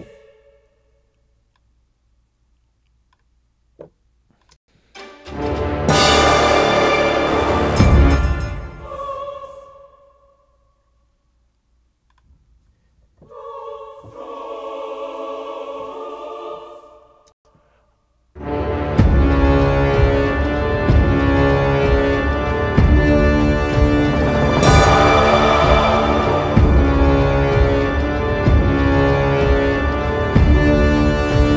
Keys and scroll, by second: 4.6 space, 8.1 space, 17.4 space.